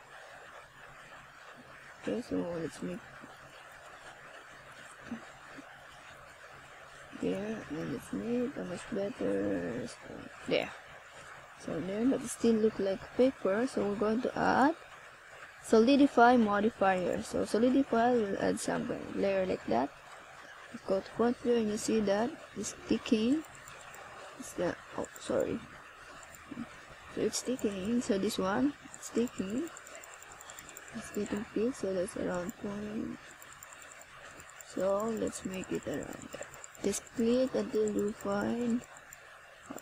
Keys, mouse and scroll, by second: 1.4 ctrl+KP_Add, 2.9 middle click, 11.5 click, 15.3 click, 15.8 click, 16.7-18.0 scroll up 1, 18.0 right click, 18.8 shift+right click, 19.6 ctrl+z, 20.6 right click, 21.8 ctrl+z, 22.0 ctrl+z, 23.4 click, 23.6 click, 23.7 click, 26.9 click, 30.2 click, 39.3 click.